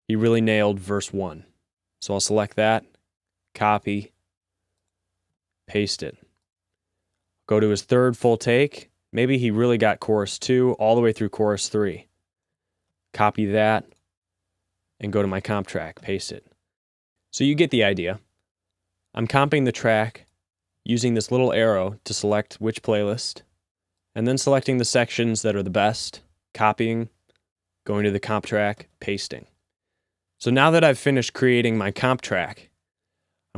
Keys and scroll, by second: 2.9 c, 5.6 v, 13.2 c, 16.2 v, 16.7 z, 26.0 c, 29.1 v.